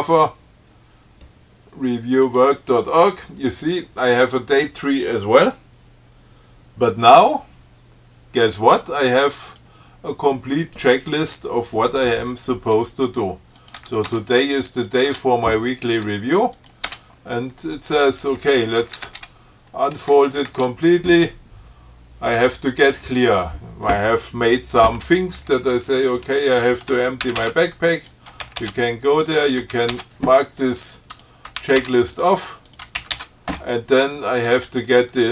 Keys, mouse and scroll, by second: 2.5 click, 9.7 click, 13.8 click, 14.0 Tab, 15.1 click, 15.3 Tab, 16.8 click, 17.1 Tab, 19.1 shift+Tab, 20.7 ctrl+shift+Tab, 23.1 click, 27.5 ctrl+c, 28.2 click, 28.7 ctrl+c, 29.7 ctrl+click, 30.0 ctrl+c, 31.4 click, 31.8 ctrl+c, 32.4 ctrl+click, 32.9 ctrl+click, 33.2 ctrl+c.